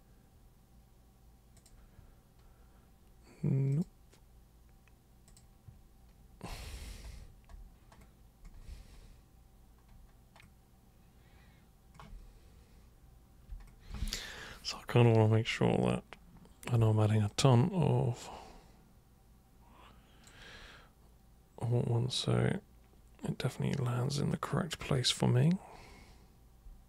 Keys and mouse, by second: 1.5 super+click, 3.7 super+click, 5.3 super+click, 17.2-20.3 super+drag, 24.3-26.8 super+drag.